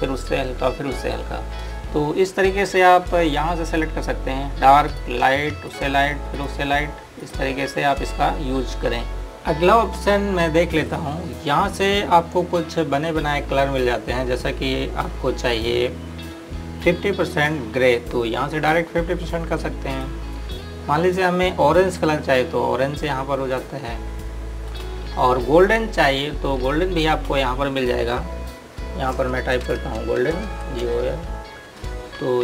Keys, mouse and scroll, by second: 4.5 click, 11.7 click, 18.5 click, 25.4 click, 31.0 g.